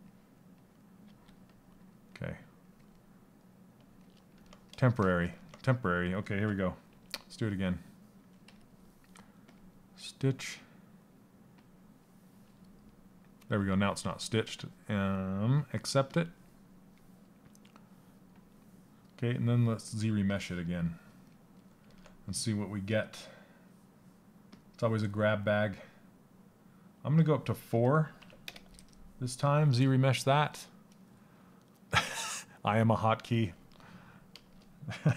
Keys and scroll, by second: 0.6 s, 6.5 2.